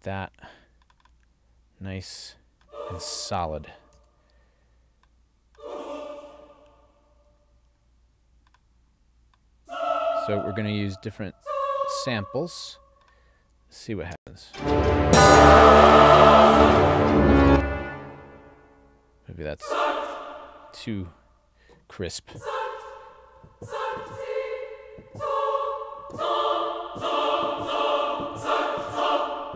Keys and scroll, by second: 14.2 space, 17.5 space.